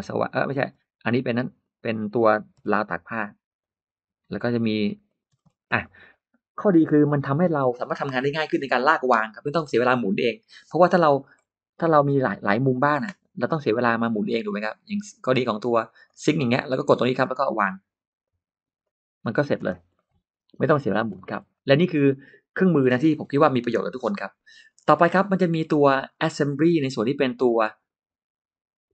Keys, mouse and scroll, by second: 0.5 middle click, 0.5 space, 1.0 click, 1.5 click, 2.2 middle click, 2.4 m, 4.3 click, 4.9 click, 5.2-6.0 scroll up 2, 5.4 space, 5.6 middle click, 6.4 middle click, 6.7-7.0 scroll down 1, 11.2 middle click, 11.2-11.5 scroll up 1, 15.9 click, 16.6 click, 17.1 middle click, 18.1 click, 18.6 click, 19.5-20.0 scroll up 1, 19.6 space, 19.8 middle click, 20.6-21.9 scroll up 3, 24.5-25.1 scroll up 2, 24.9 middle click, 25.1-25.7 scroll down 1, 25.9-26.6 scroll up 2, 27.4 click.